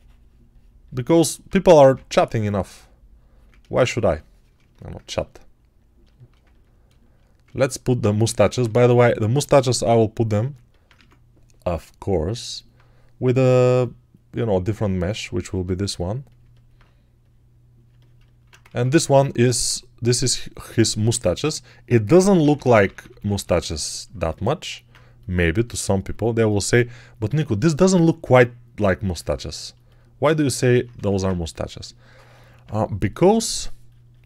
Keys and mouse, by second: 1.5 1, 6.9 alt+shift+right click, 8.1 ctrl+Tab, 8.5 shift+a, 10.8 Tab, 15.6 s, 16.3-17.7 alt+middle drag, 18.5 ctrl+Tab, 20.9-26.0 middle drag, 20.9-24.0 typing, 30.8 1.